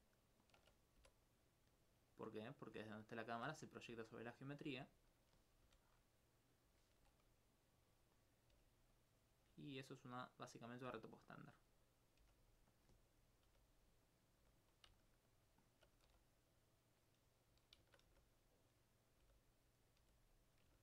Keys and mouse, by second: 2.2 click, 2.8 alt+click, 4.2 alt+click, 4.9 alt+click, 6.2 alt+e, 8.3 right click, 9.0 click, 9.5 g, 10.4 click, 10.7 right click, 10.9 g, 11.4 click, 11.7 right click, 12.2 g, 13.2 right click, 14.1 click, 14.4 g, 14.6 click, 15.0 alt+click, 15.3 alt+m, 15.6 alt+click, 16.9 click, 17.5 right click, 17.9 shift+right click, 18.6 click, 19.0 right click, 19.3 g, 19.5 click, 19.8 right click, 20.0 g, 20.6 click.